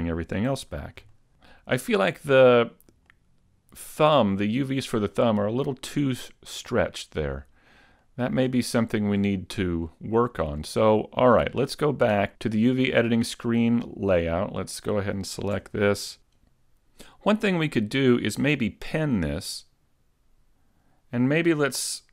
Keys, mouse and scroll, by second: 0.5 a, 0.8-1.2 scroll down 2, 1.2 shift+middle click, 1.8 middle click, 3.1 shift+middle click, 4.1-4.4 scroll up 2, 5.1 middle click, 7.7-8.1 scroll down 2, 8.1 middle click, 8.7 shift+middle click, 9.9 middle click, 11.8 click, 14.6 right click, 15.6 Tab, 16.5 a, 18.6 click, 19.1 right click, 20.5 g.